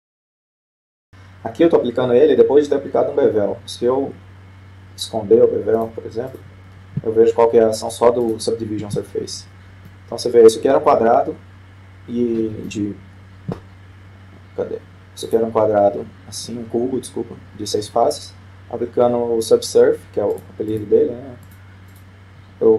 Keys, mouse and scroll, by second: 0.5 middle click, 0.5-0.9 scroll down 1, 6.8-8.7 drag, 9.3-10.6 drag, 10.9-12.3 middle drag, 16.4-17.8 drag, 17.6-19.1 middle drag, 21.5-22.7 drag.